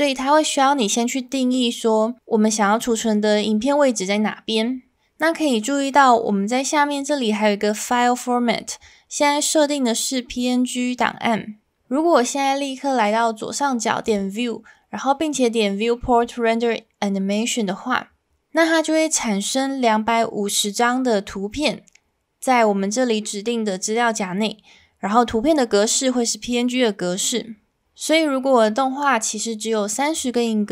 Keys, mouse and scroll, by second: 14.0-22.8 drag.